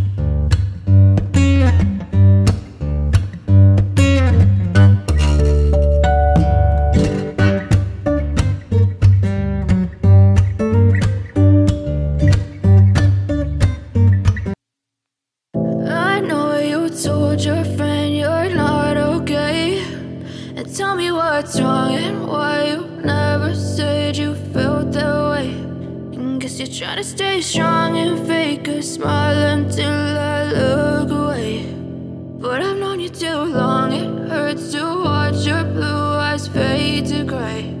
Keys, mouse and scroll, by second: 14.4 double click, 14.9-16.0 typing, 29.4 middle click, 29.7 alt+w, 31.3 shift+m.